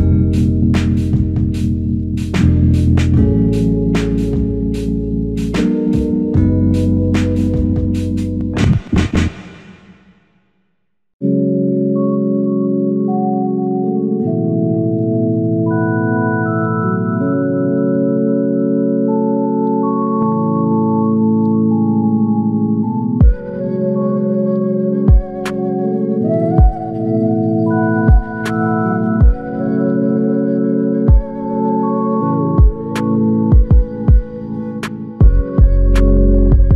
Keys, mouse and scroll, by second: 11.7 ctrl+scroll up 1, 11.7 ctrl+scroll down 1, 11.9 ctrl+scroll up 1, 18.2 ctrl+scroll down 1.